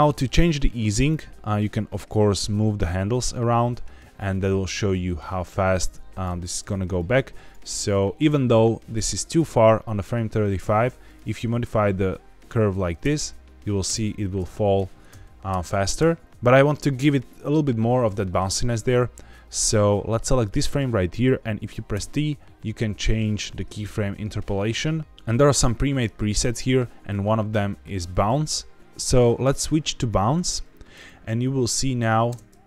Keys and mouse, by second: 0.2 click, 0.9 click, 1.9-6.2 drag, 6.9 click, 9.2 click, 11.0 click, 12.8 space, 14.4 ctrl+z, 19.3-19.7 drag, 20.3 click, 21.8 t, 25.1 t, 28.8 t, 31.4 click, 32.2 space.